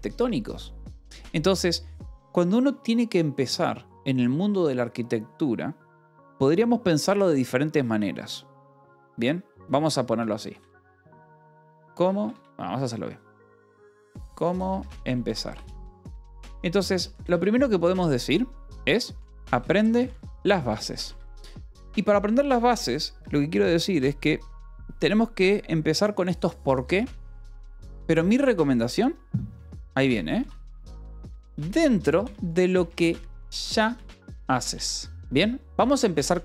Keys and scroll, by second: 0.1 Escape, 8.9 Return, 10.6-17.3 typing, 15.9 Escape, 19.4-22.1 typing, 24.9 Escape, 30.3-36.4 typing.